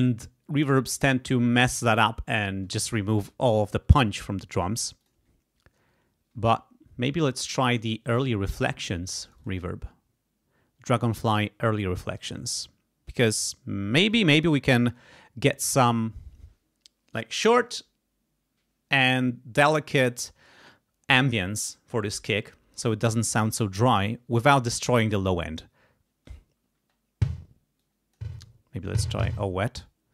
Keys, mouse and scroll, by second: 3.2 right click, 5.0 click, 9.3 click, 12.2 click, 14.1-15.7 drag, 26.8 space, 27.8 click, 28.4 click.